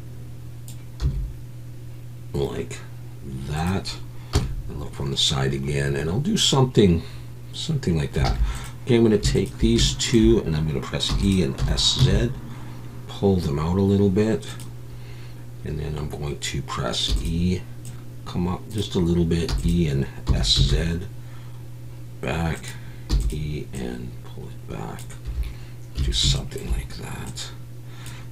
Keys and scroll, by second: 1.0 s, 4.3 KP_3, 8.2 alt+a, 11.1 e, 11.6 s, 12.0 z, 17.1 e, 19.5 e, 20.3 s, 20.5 z, 23.1 e, 26.0 a.